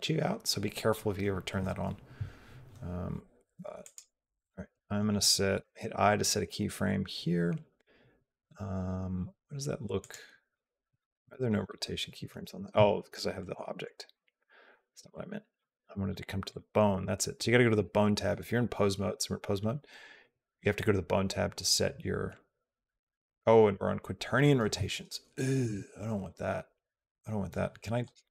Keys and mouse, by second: 3.7 click, 13.0 ctrl+z, 13.5 ctrl+z, 13.7 ctrl+z, 14.1 ctrl+z, 16.3 click, 25.5 a, 27.8 click.